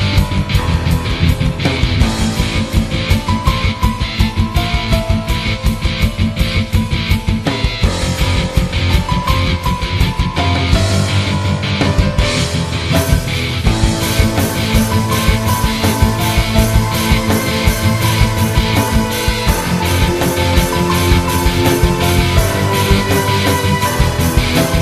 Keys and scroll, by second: 1.9 -, 4.7 -, 18.8 -.